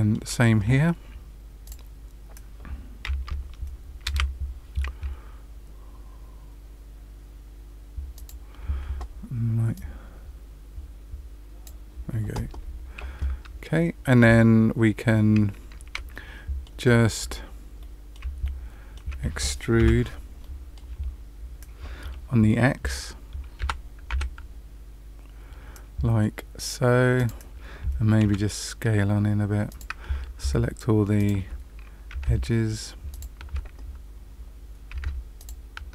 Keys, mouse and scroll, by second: 1.6 click, 4.0 ctrl+shift+b, 9.7 click, 14.6-15.6 scroll up 2, 16.1 middle click, 16.8-17.7 scroll down 3, 17.7 middle click, 18.4 shift+middle click, 19.7 KP_Decimal, 20.4 middle click, 20.9-21.9 scroll down 1, 21.9-22.8 scroll down 1, 23.6 e, 28.2 s, 31.1 alt+click, 33.0 alt+shift+click, 34.3-34.8 scroll up 1, 35.3 alt+shift+click.